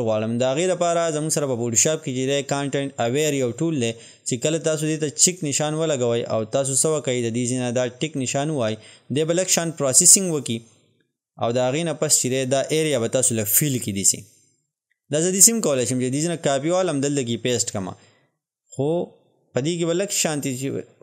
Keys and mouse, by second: 8.1 click.